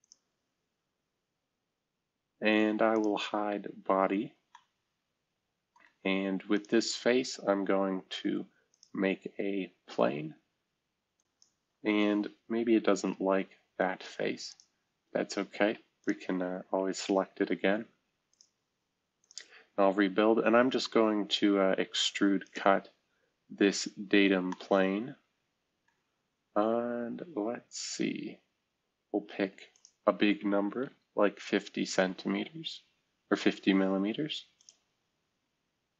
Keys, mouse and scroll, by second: 3.3 space, 4.5 middle click, 6.6-7.3 drag, 8.7-10.3 drag, 11.1 click, 12.6 Delete, 14.4 click, 16.0 click, 18.3-19.6 drag, 22.4 click, 26.4-27.2 scroll up 2, 30.7 0, 31.4 Tab, 34.5 click.